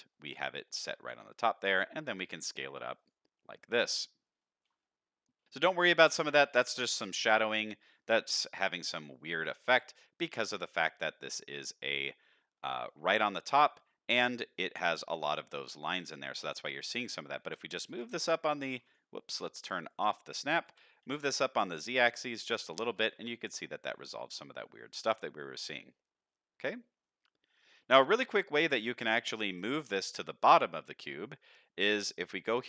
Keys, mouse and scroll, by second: 0.6 shift+middle drag, 1.1 s, 3.3-3.8 shift+middle drag, 4.1 scroll up 2, 4.4 shift+middle drag, 4.8-5.3 middle drag, 5.9-6.4 middle drag, 6.6-7.0 middle drag, 7.3-8.4 shift+middle drag, 8.6 middle click, 9.4-9.8 middle drag, 10.2-10.6 middle drag, 11.0-11.6 middle drag, 11.8-12.6 middle drag, 12.9 shift+middle click, 13.8-14.2 shift+middle drag, 14.4 middle click, 15.5 middle click, 16.9 middle click, 17.4 g, 19.8 click, 20.6 g, 21.3-22.4 shift+middle drag, 23.1 alt+a, 23.2-23.7 middle drag, 24.4 middle drag, 25.0-26.2 scroll down 2, 25.3-26.2 middle drag, 27.0-27.6 middle drag, 27.8-28.2 scroll down 2, 28.2 middle drag, 28.9 drag, 29.3-29.8 middle drag, 30.4-31.3 middle drag, 31.5 middle click, 32.3 click.